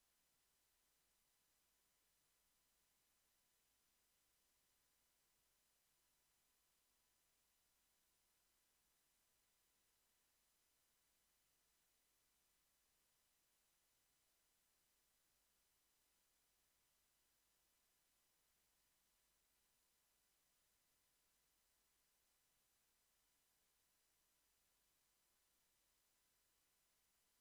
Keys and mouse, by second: 0.3 a, 0.7 ctrl+s, 1.8 Tab, 5.7 Tab, 9.8 s, 11.1 Tab, 14.6-15.6 drag, 23.3 KP_1, 25.9 KP_5.